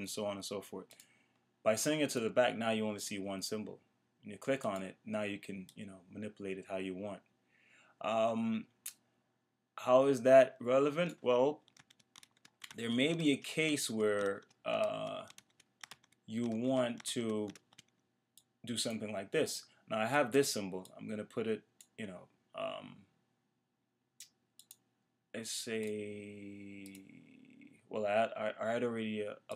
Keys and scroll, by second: 11.8 super+z.